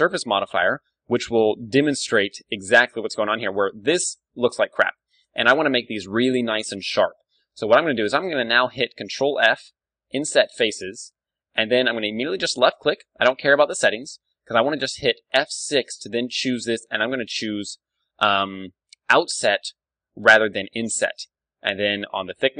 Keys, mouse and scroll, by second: 1.2 click, 2.4 Tab, 2.6 click, 3.5-4.8 middle drag, 4.8 KP_1, 5.1 Tab, 5.3-7.3 drag, 9.3 ctrl+f, 12.7-14.6 drag, 15.4 F6.